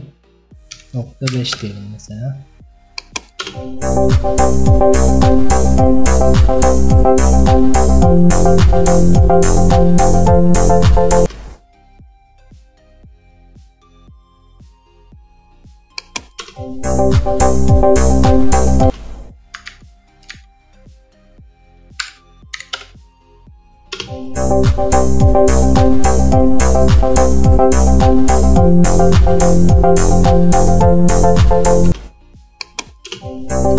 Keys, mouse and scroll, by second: 1.6-3.5 drag, 3.5 space, 11.3 space, 14.6-16.5 drag, 16.5 space, 18.9 space, 19.8 ctrl+z, 20.4 ctrl+z, 22.8-24.1 drag, 24.1 space, 32.0 space, 32.7 click, 33.2 space.